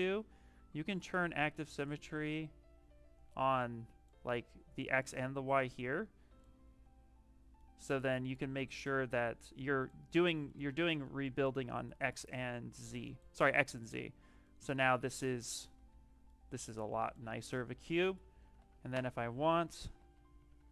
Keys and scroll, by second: 13.7 shift+f, 15.4 d, 19.8 ctrl+shift+z, 20.1 shift+f, 20.5 shift+f.